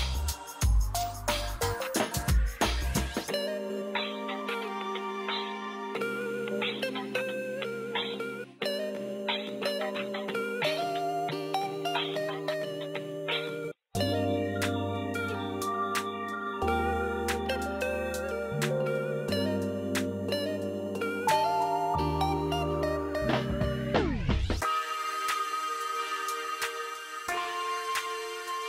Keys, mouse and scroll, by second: 1.0 right click, 1.5 scroll down 1, 2.8 scroll up 1, 4.0 ctrl+z, 5.1 right click, 6.1 click, 7.1 right click, 8.1 click, 8.7 scroll up 1, 10.6-13.9 drag, 13.9 ctrl+z, 14.6 ctrl+z, 15.2-19.6 drag, 19.6 right click, 20.8 ctrl+r, 21.3 scroll down 1, 22.5 scroll down 1, 23.7 ctrl+z, 24.7 F2, 25.1-28.6 drag.